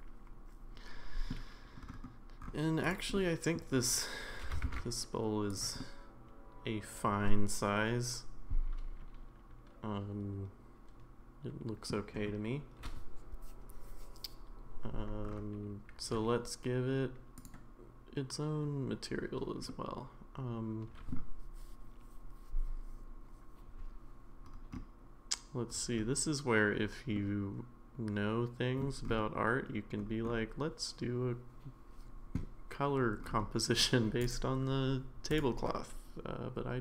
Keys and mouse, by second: 2.8 click, 3.2-3.6 middle drag, 4.4 g, 5.8-11.9 middle drag, 17.4 click, 19.7-21.1 middle drag, 27.2-28.8 middle drag.